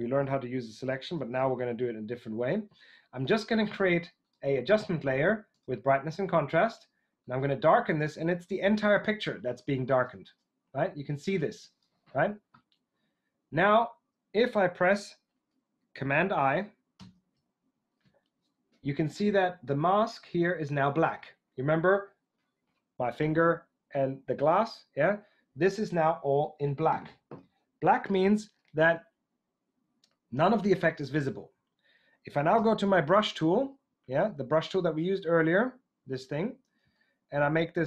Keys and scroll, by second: 1.1 super+d, 16.9 super+i, 32.5 b.